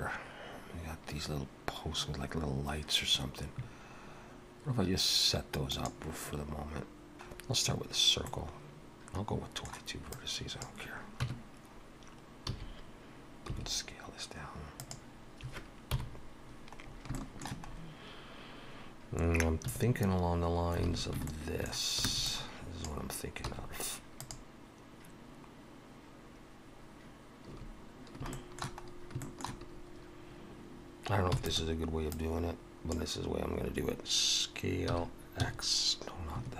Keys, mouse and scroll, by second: 6.8 middle click, 6.8 shift+a, 7.3-7.6 scroll down 3, 8.2 middle click, 10.1 click, 11.2 Tab, 12.5 a, 13.4 s, 15.9 KP_7, 16.9 scroll up 2, 17.1 shift+middle click, 17.7-18.9 scroll up 1, 18.9-19.7 scroll up 1, 19.7 1, 20.9 alt+a, 21.3 shift+middle click, 22.0 b, 23.5 x, 27.5 a, 28.3 shift+middle click, 28.9 scroll up 1, 29.2 shift+middle click, 31.3 e, 32.1 click, 34.8 s.